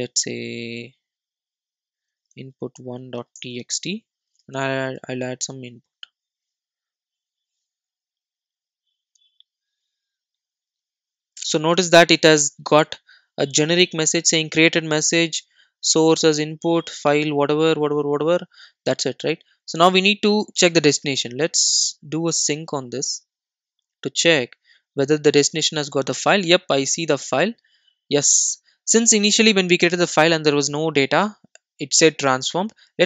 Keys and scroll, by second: 5.2 super+d, 5.7 super+s.